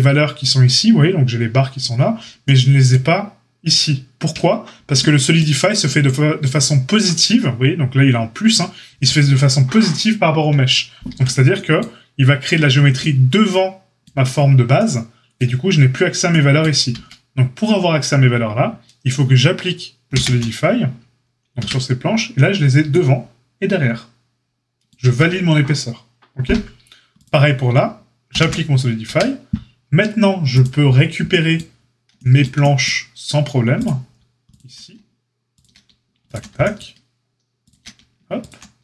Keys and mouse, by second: 4.7 Tab, 11.0 Tab, 16.9 Tab, 20.1 ctrl+a, 21.5 Tab, 25.0 Tab, 28.3 ctrl+a, 30.4 Tab, 30.4-33.8 drag, 33.8-34.4 middle drag, 34.4 ctrl+click, 34.7-38.3 shift+middle drag, 38.3 ctrl+click, 38.4-38.8 ctrl+middle drag.